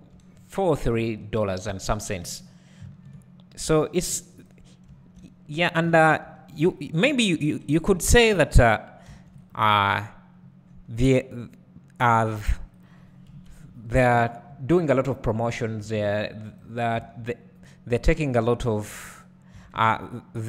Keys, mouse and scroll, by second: 0.3-0.6 scroll down 1, 1.7 shift+click, 2.8 ctrl+b, 4.4 right click, 6.2 ctrl+r, 7.6-7.9 scroll down 1, 7.9 alt+a, 9.1 ctrl+r, 12.8 click, 13.3 KP_Decimal, 15.8 ctrl+r, 17.0 s, 18.0 click, 19.5 s.